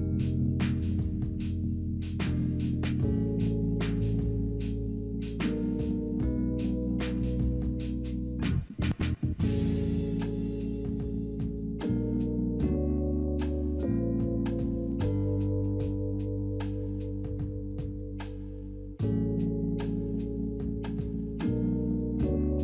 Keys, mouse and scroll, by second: 0.1 double click, 0.4 8, 0.5 Return, 4.2 1, 4.3 Return, 9.7 3, 9.8 Return, 17.5 alt+middle click, 18.5 ctrl+right click.